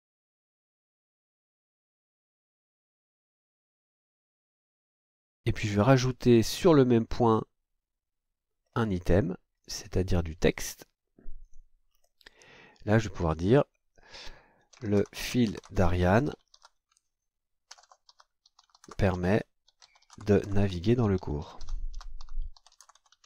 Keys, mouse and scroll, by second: 1.2-4.7 typing, 6.3 scroll up 2, 8.6 scroll down 2, 9.6 click, 10.5 click, 11.4 click, 11.9-12.2 scroll down 2, 12.8 click, 14.5-23.2 typing.